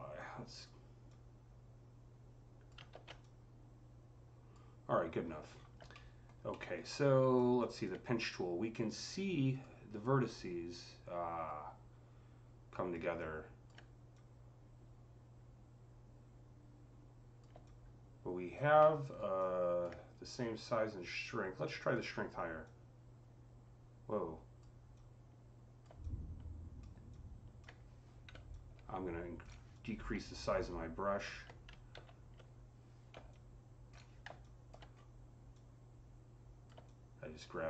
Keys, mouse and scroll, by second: 0.1-5.1 drag, 2.8 ctrl+z, 5.1-5.5 scroll up 8, 5.7 middle click, 6.3-7.4 alt+middle drag, 6.9-10.1 alt+drag, 10.1-20.3 alt+drag, 18.6-20.3 alt+middle drag, 20.3-20.8 scroll down 4, 21.7 click, 22.5-25.9 drag, 25.9-33.1 alt+drag, 28.2-29.6 typing, 31.8 ctrl+z, 33.1-33.7 typing, 33.1 click, 34.3 alt+click, 34.7-35.4 scroll up 4, 35.4-37.6 drag.